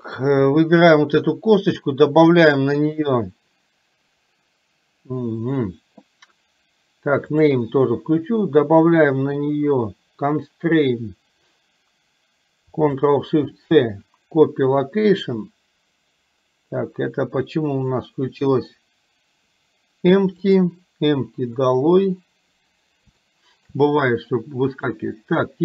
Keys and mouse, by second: 0.6 click, 7.4 click, 20.6 click, 23.3-23.8 shift+middle drag, 24.7 click.